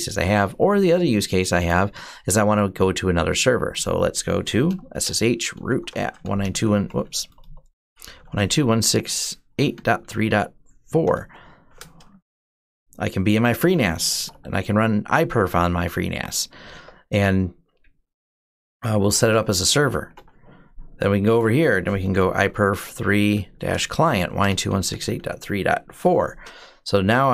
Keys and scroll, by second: 4.4-10.8 typing, 11.0 Return, 13.6-14.5 typing, 16.1-16.8 typing, 18.6-19.3 typing, 19.8 Return, 21.6-27.3 typing.